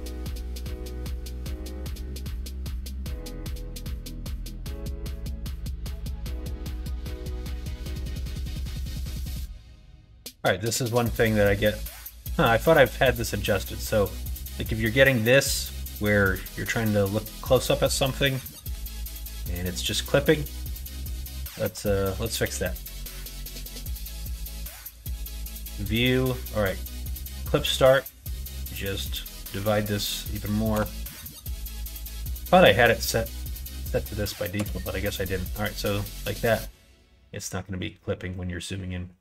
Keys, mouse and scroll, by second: 0.4 click, 4.3-5.6 shift+middle drag, 6.7 middle click, 8.0 middle click, 8.9 middle click, 13.1 middle click, 17.8 middle click, 18.4 middle click, 20.2 n, 20.9 n, 21.5 Tab, 22.3 n, 24.8 click, 25.3 click, 27.8-35.3 drag.